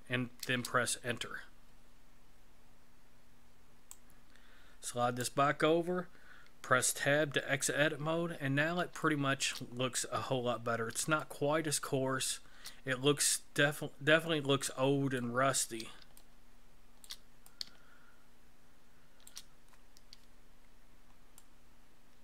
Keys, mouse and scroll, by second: 3.9 click, 6.6 Tab, 7.7-8.4 scroll down 4, 8.4-8.8 scroll down 1, 9.0 shift+middle click, 10.0 scroll up 3, 10.7 scroll up 2, 11.2 shift+middle click, 13.2 middle click, 15.4 scroll down 3, 16.1 shift+middle click, 17.4 middle click, 20.5-20.9 scroll down 4, 21.3 middle click.